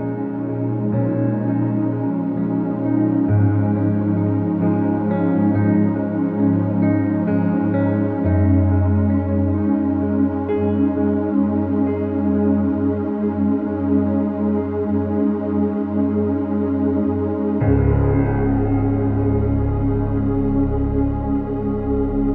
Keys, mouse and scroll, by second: 10.2 click, 14.3 space, 14.6 click, 14.7 space, 15.3 ctrl+=, 15.9 space, 16.0 click, 16.1 space, 16.6 click, 20.7 space, 21.0 click, 21.1-21.4 space, 21.6 click.